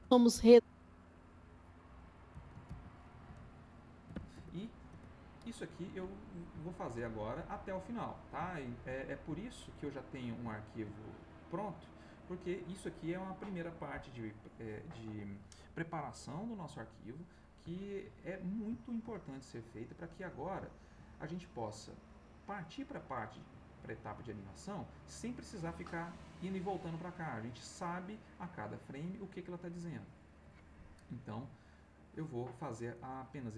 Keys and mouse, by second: 0.9 click, 2.3 m, 4.0 o, 4.1 s, 5.4 Return, 6.1 middle click, 8.0 middle click, 8.5 ctrl+middle click, 9.0 ctrl+middle click, 9.4 ctrl+middle click, 9.9 ctrl+middle click, 10.5 ctrl+middle click, 11.1 ctrl+middle click, 11.7 ctrl+middle click, 16.5 middle click, 17.2 click, 18.7 ctrl+click, 20.1 click, 20.7 ctrl+click, 23.1 click, 23.7 ctrl+middle click.